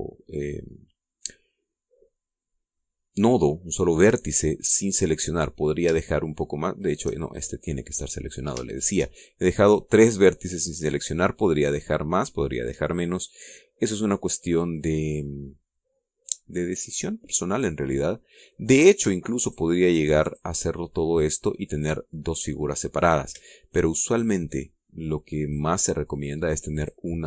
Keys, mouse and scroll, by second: 3.4-5.0 middle drag, 5.2 middle click, 7.4 shift+right click, 7.8 shift+middle click, 8.6 scroll up 1, 9.2 shift+middle click, 13.6 scroll down 2, 20.0 shift+right click, 20.4 shift+right click, 20.8 shift+right click, 26.0 shift+right click, 26.4 shift+middle click.